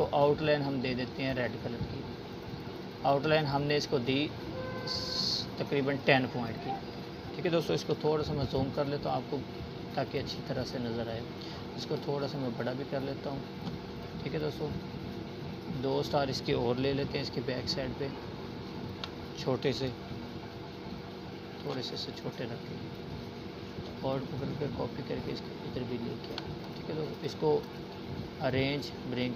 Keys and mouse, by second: 3.2 z, 3.9-4.6 drag, 12.9-14.5 alt+drag, 16.4-17.3 alt+shift+drag, 19.5-21.9 alt+click, 23.0 right click, 23.8-27.1 drag.